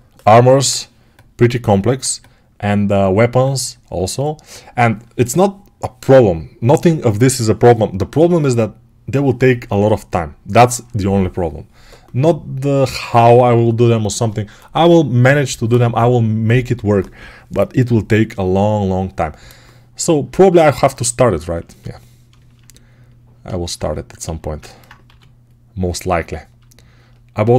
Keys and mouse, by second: 24.2 alt+q, 24.9 g, 27.3-27.5 right drag.